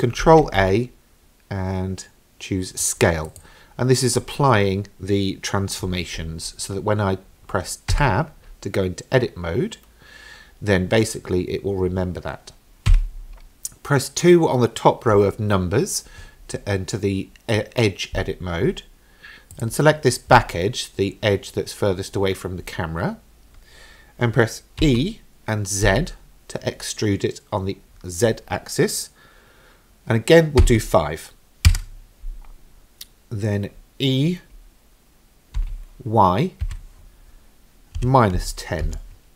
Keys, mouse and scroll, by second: 0.2 ctrl+a, 8.2 Tab, 13.0 2, 19.5 click, 24.8 e, 35.6 e.